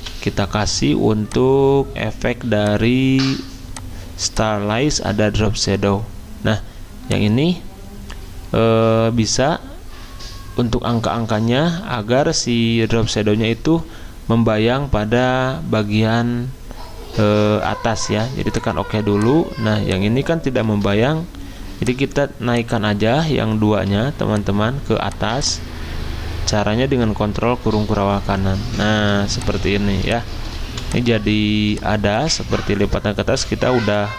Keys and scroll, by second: 0.0 v, 11.8 z, 20.7 ctrl+z, 31.5 ctrl+shift+z.